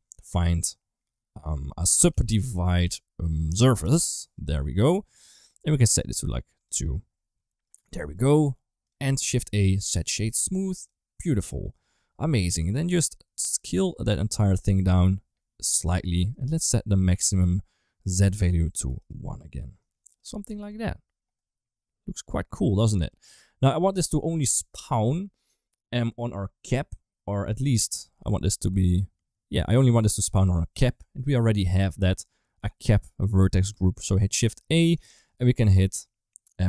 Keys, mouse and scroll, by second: 3.4 Down, 6.4 click, 7.5 click, 8.2 g, 9.1 shift+a, 11.5 shift+middle click, 12.9-15.6 shift+drag, 16.1 middle click, 16.9 middle click, 18.2 click, 20.0 click, 20.5 ctrl+s, 21.2-22.9 middle drag, 23.8 middle click, 24.3 middle click, 28.1-29.6 middle drag, 30.0 middle click, 31.6 middle click, 33.5 middle click, 34.6 click, 34.8 shift+a.